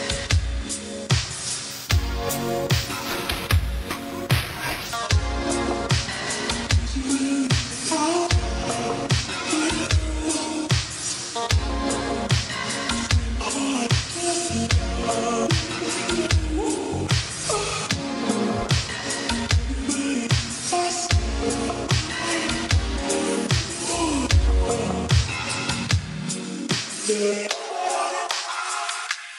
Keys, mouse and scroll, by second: 1.2 click, 4.3 right click, 6.0-6.7 scroll down 1, 6.7 right click, 7.3-7.9 scroll up 1, 7.9 click, 11.5 space, 12.6 shift+1, 14.0 click, 20.0 click, 28.4 click.